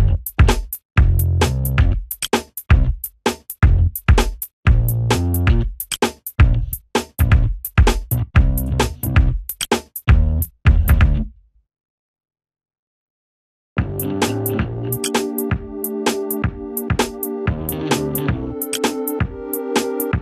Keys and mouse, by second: 0.6 g, 0.9 click, 3.5 g, 4.1 click, 5.1 ctrl+space, 6.1 F9, 6.9 click, 8.9 F2, 9.1 click, 10.9 F4, 11.3 ctrl+space, 11.7 F2, 11.8 click, 13.0 F4, 13.3 Escape, 14.4 click, 15.3 Delete, 16.2 z, 17.9 right click, 18.3 click.